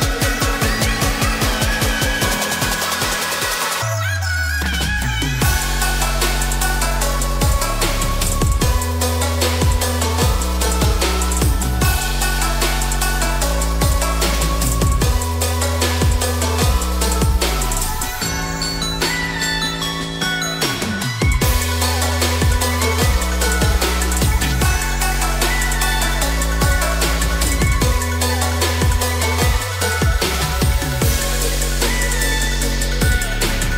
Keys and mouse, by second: 0.8 click, 1.1 s, 3.9 click, 4.2 middle click, 4.9 g, 5.3 y, 7.7 click, 9.1 click, 10.1-12.1 middle drag, 12.9 shift+middle click, 15.4 shift+middle click, 23.8 click, 24.7 click, 26.1 click, 26.6 click, 27.9-28.5 drag, 28.5 middle click, 30.5 Tab, 31.6-32.1 shift+middle drag, 33.4 click.